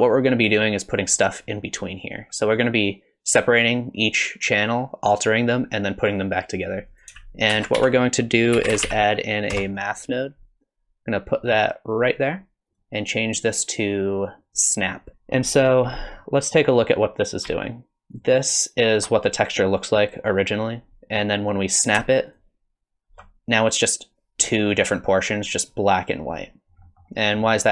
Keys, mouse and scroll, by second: 6.9 click, 7.5 shift+a, 12.7 click, 15.1-15.6 scroll up 1, 15.6 middle click, 18.2 ctrl+shift+click, 22.4 ctrl+shift+click, 26.8 middle click, 27.4 middle click.